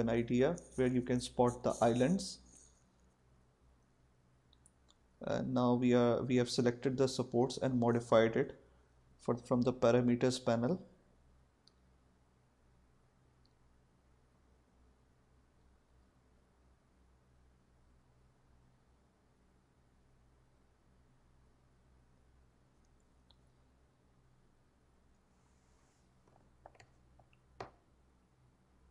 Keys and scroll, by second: 0.2-1.0 typing, 10.0-11.0 typing, 13.0 4, 13.4 5, 14.6-16.1 typing, 16.1 Return, 18.9-19.9 typing, 19.9 Return, 24.7 3, 25.2 Return.